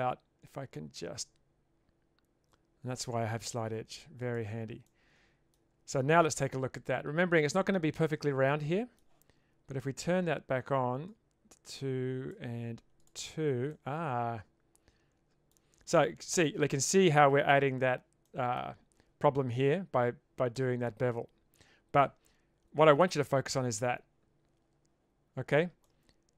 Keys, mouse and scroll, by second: 4.9-5.5 middle drag, 6.4 Tab, 8.5-9.0 middle drag, 11.2-12.4 drag, 13.0 click, 13.7-15.5 middle drag, 16.3 middle click, 16.9 middle click, 18.3 middle click, 20.5-22.0 middle drag, 25.8-26.3 middle drag.